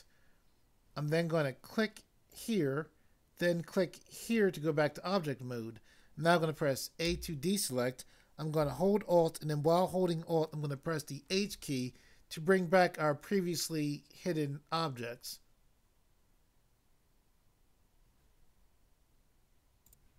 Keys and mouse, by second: 2.4 click, 4.2 click, 7.0 a, 11.3 alt+h, 19.8 click.